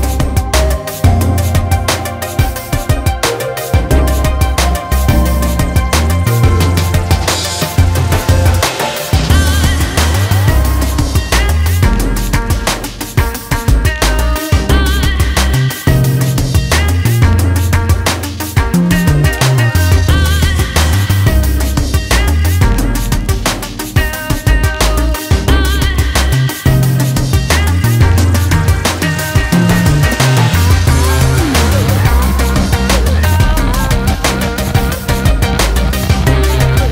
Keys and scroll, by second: 19.4-19.8 typing, 20.7 Return, 36.3 ], 36.6 ].